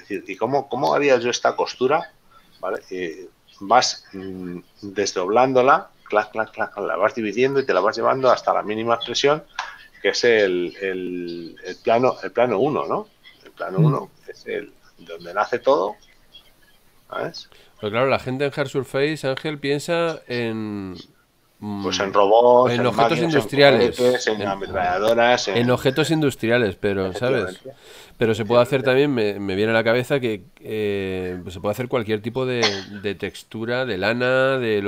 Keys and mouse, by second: 12.1 click, 16.2 click, 17.5 middle click, 20.9 shift+middle click, 29.2 click, 30.3 shift+middle click, 34.6 shift+z.